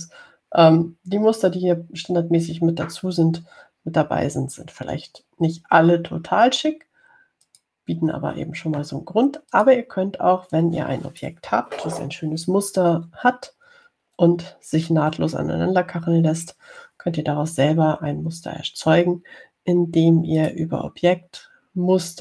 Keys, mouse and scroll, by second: 0.0 click, 8.7 click, 10.8 click, 11.8 click, 17.6 Delete, 21.6 click.